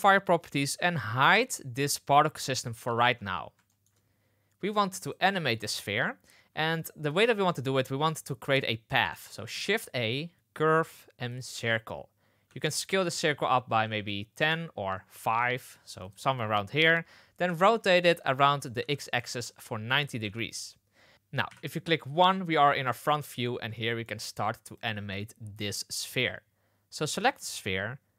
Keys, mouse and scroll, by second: 1.3 click, 3.6 shift+middle drag, 9.4 shift+a, 12.4 s, 15.3 s, 17.4 r, 20.1 KP_1, 21.4 KP_1, 23.2 middle click, 23.7 shift+middle drag, 24.7 click.